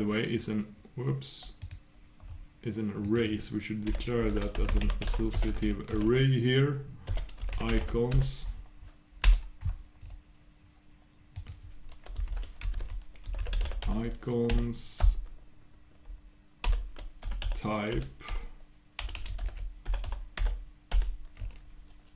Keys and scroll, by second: 2.9 shift+super+Return, 8.2 shift+super+Return.